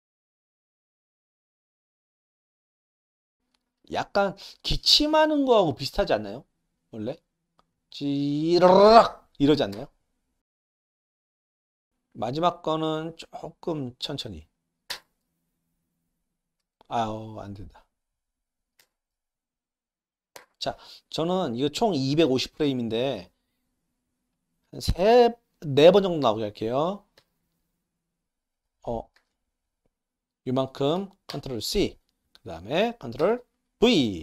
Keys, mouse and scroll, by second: 0.1 ctrl+c, 0.1 click, 0.2 click, 0.4 ctrl+v, 0.5 drag, 0.7 ctrl+c, 0.7 click, 0.9 ctrl+v, 0.9 click, 1.0 click, 1.0-3.2 typing, 1.2 click, 1.4 click, 1.5 click, 1.6 click, 1.8 click, 2.1 drag, 2.3 click, 2.4 click, 2.6 click, 2.8 click, 2.9 click, 3.0 click, 3.3 click, 6.9 click, 7.7-8.1 drag, 9.7-11.8 typing, 10.6 click, 10.7 drag, 11.6 click, 12.1 click, 13.1-13.9 drag, 14.7 click, 14.9 space, 16.6 space, 17.3 click, 18.6 click, 18.8 space, 20.4 space, 20.6 drag, 22.5 shift+middle click, 23.7-24.3 drag, 25.0 ctrl+c, 26.0 click, 27.2 ctrl+v, 29.2 ctrl+z, 29.6-30.2 drag, 31.3 ctrl+c, 32.2 click, 33.2 ctrl+v.